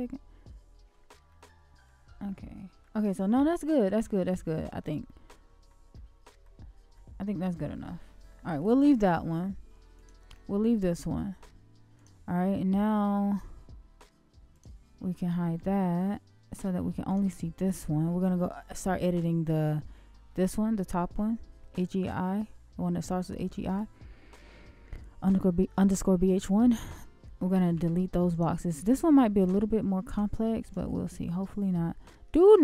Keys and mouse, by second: 1.3-1.8 middle drag, 2.2-2.8 shift+middle drag, 5.0-5.7 shift+middle drag, 5.9-6.4 shift+middle drag, 6.9-7.4 shift+middle drag, 7.8-8.3 shift+middle drag, 9.9 shift+click, 12.0 shift+click, 14.5 shift+click, 15.7-16.8 middle drag, 27.7 x, 30.0 x, 32.3-32.6 middle drag.